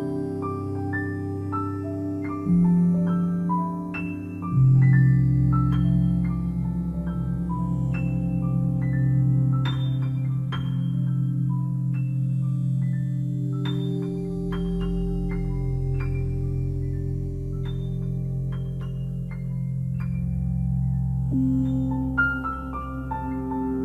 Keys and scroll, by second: 6.9 [, 12.2 ], 17.5 ctrl+z.